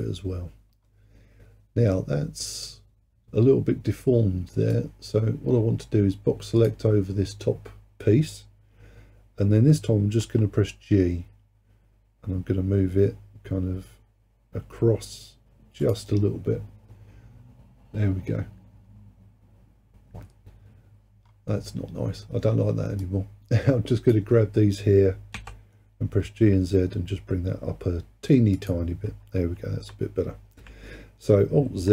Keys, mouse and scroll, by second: 0.9-3.0 scroll up 1, 4.8 click, 10.2 g, 19.1-21.3 scroll down 4, 21.3-23.1 scroll up 3, 23.1 click, 25.4 g, 29.3-29.6 scroll down 2, 31.7 alt+z.